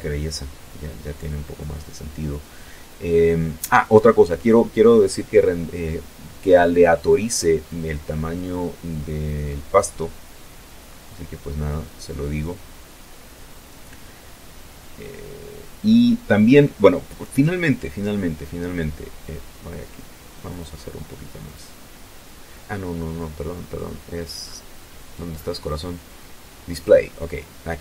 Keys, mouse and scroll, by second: 5.9-7.7 drag, 13.7-14.1 scroll up 2, 17.2-17.8 scroll up 4, 18.7 click, 19.7 click, 20.5-22.3 scroll down 4, 23.1-23.8 scroll up 3, 25.0 click, 26.6 click.